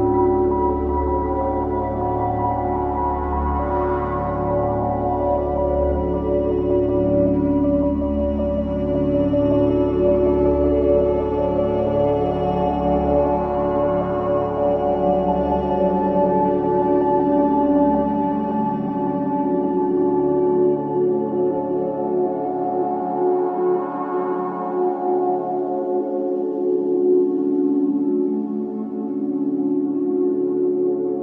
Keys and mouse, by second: 0.2 click, 2.1 ctrl+s, 3.8 g, 4.8 click, 5.6 click, 7.1-8.2 ctrl+alt+drag, 8.9 ctrl+s, 9.5 ctrl+alt+click, 11.9 click, 13.8 ctrl+s, 14.4-15.7 ctrl+alt+drag, 16.3-17.4 drag, 18.3 g, 19.2 Escape, 21.6-25.8 drag, 24.7 Left, 24.8 Left, 25.9 i, 27.2 click, 28.6 click, 30.5 Left, 30.8 Left.